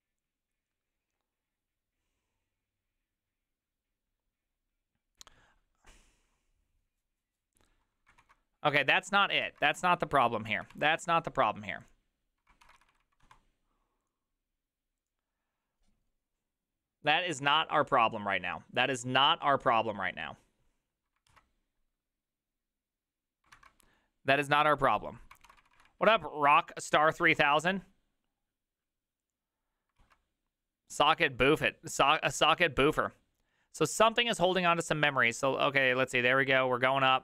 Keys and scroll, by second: 8.3 alt+q, 10.6 alt+{, 10.8 alt+[, 12.7 alt+r, 12.8 Right, 13.0 Right, 13.1 Right, 13.3 Escape, 23.6 alt+{, 25.5 alt+r, 25.7 Right, 25.8 Right, 25.9 Right, 26.1 Right, 26.5 Escape, 27.3 Escape, 27.5 Escape, 30.1 alt+{.